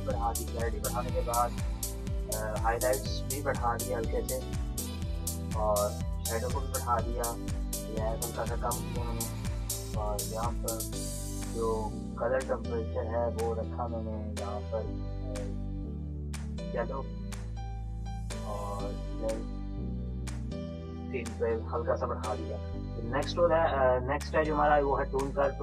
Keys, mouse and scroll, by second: 2.6-5.5 drag, 7.4-10.0 drag, 10.3-17.1 drag, 25.5-25.6 drag.